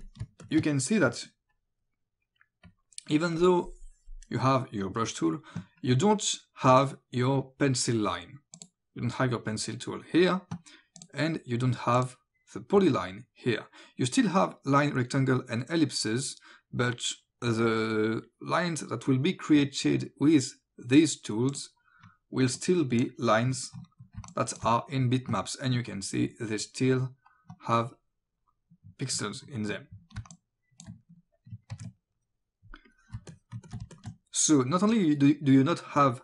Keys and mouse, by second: 0.0 click, 0.2 space, 0.4 click, 2.7 click, 8.6 click, 11.0 click, 21.5 click, 23.5 click, 24.2 space, 24.3 click, 30.2 space, 30.4 click, 31.8 ctrl+z, 32.9 click, 33.2 space, 33.3 click, 34.0 click.